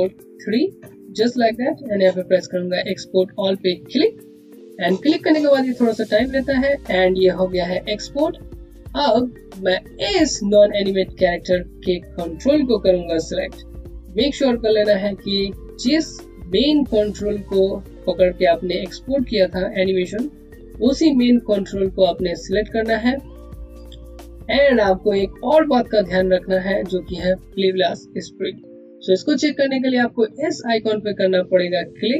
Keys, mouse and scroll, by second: 0.0-0.7 typing, 4.4 click, 9.8 click, 21.5 click.